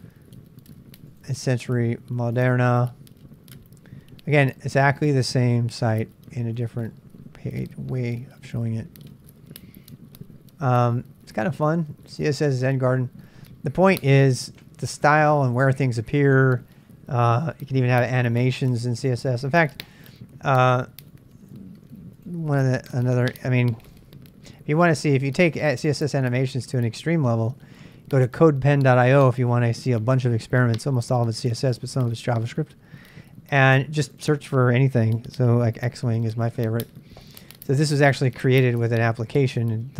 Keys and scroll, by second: 24.5-26.8 typing, 27.4 Return, 35.5-36.9 typing.